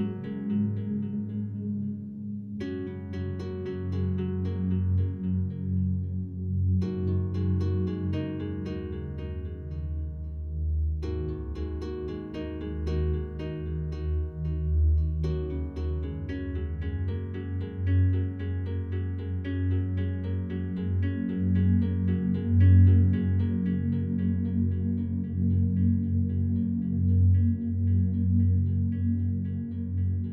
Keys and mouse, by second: 0.3 click, 1.0 alt+shift+click, 2.4 click, 3.4 click, 4.2 click, 4.6 click, 5.7 click, 6.2-6.7 typing, 7.7 click, 8.0-8.7 typing, 8.2 click, 8.8-9.6 drag, 10.1-11.1 drag, 12.4 click, 13.5 click, 14.5-15.2 typing, 15.8 click, 16.6 click, 17.3 ctrl+v, 17.7 Return, 18.2 click, 19.1 Delete, 19.6 click, 20.5 Delete, 21.8 ctrl+alt+click, 22.7 drag, 26.1 click, 27.0 click, 27.4 click, 28.4 click, 30.0 click.